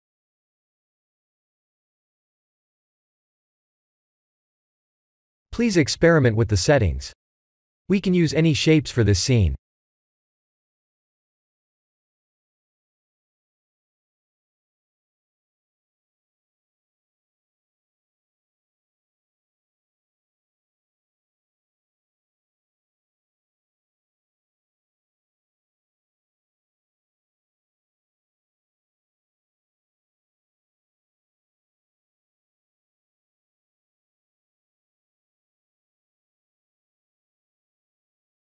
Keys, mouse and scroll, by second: 1.8-5.1 middle drag, 6.1 click, 8.3 click, 8.9 click, 9.3 click, 9.7 click, 10.0 click, 10.8 click, 13.6-16.0 drag, 16.2-18.7 middle drag, 20.2-26.7 drag, 27.8-29.3 drag, 29.6-33.0 drag, 33.7-35.9 drag, 37.6 click.